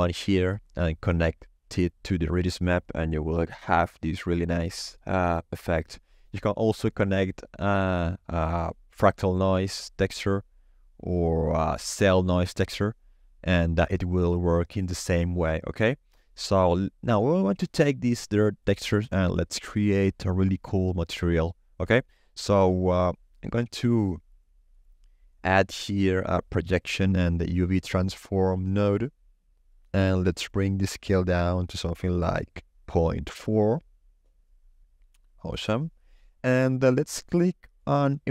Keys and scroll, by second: 31.4 ., 31.7 4, 31.8 Return.